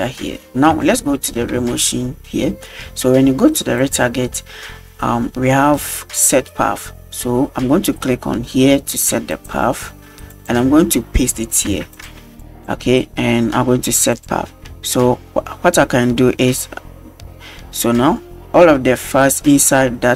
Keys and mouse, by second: 0.9-1.4 shift+middle drag, 3.8 click, 9.4 click.